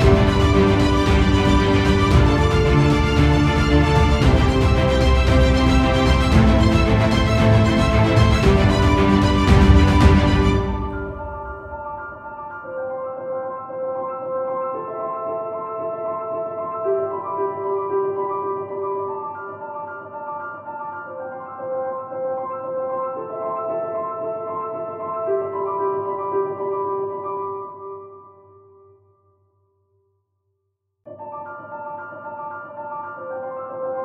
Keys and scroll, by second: 9.2 ctrl+shift+z.